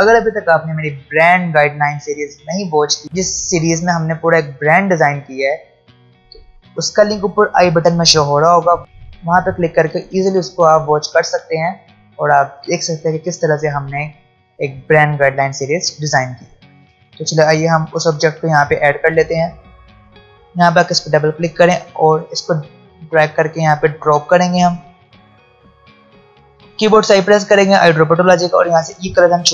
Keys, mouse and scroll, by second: 18.6-26.4 drag, 22.9-24.3 drag, 26.8 i, 28.7 click.